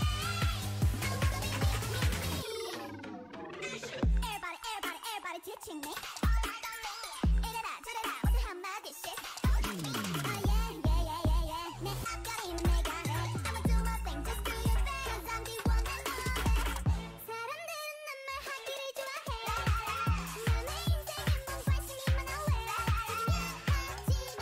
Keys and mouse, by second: 0.8 Tab, 2.3-4.5 drag, 5.8 ctrl+z, 7.5 s, 8.5 g, 10.0 a, 10.4 click, 11.1 middle click, 11.9 ctrl+Tab, 14.1 s, 15.1 middle click, 16.3 s, 16.8 a, 19.9 n, 21.0 click, 21.2 n, 21.7-23.0 middle drag.